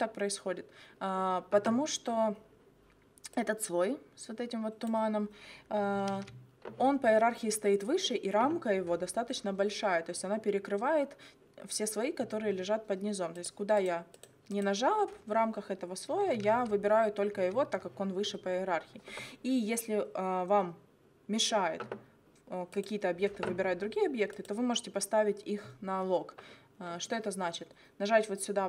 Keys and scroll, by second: 6.1 ctrl+z, 16.5 ctrl+z.